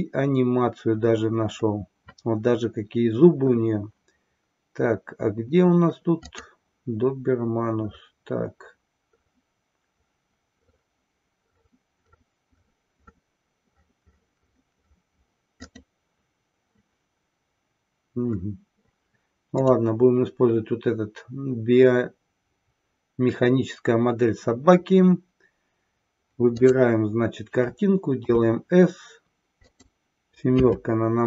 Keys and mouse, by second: 26.5 click, 30.6 KP_7.